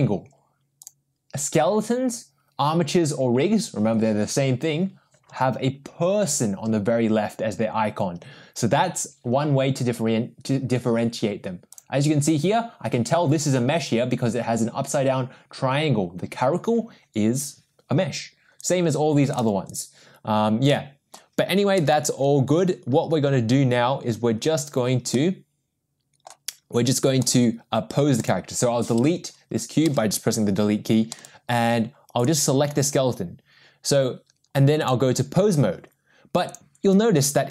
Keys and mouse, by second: 0.8 click, 11.7 click, 19.7 click, 20.7-21.2 middle drag, 25.1-26.3 middle drag, 30.0 Delete, 31.1 middle click, 34.8-36.1 drag, 36.5 click.